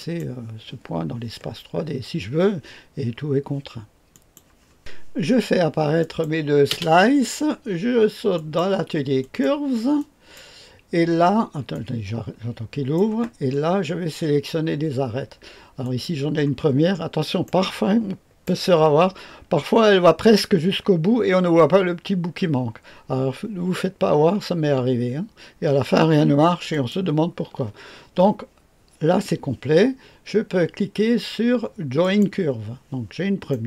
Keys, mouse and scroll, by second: 4.1 click, 5.9 click, 6.6 space, 8.3 click, 9.1 click, 9.9 click, 11.6-13.4 drag, 13.4-15.7 scroll up 1, 15.7 click, 16.8-17.4 scroll up 1, 17.4-18.4 right drag, 26.7 ctrl+click, 31.9 click, 33.4 middle click.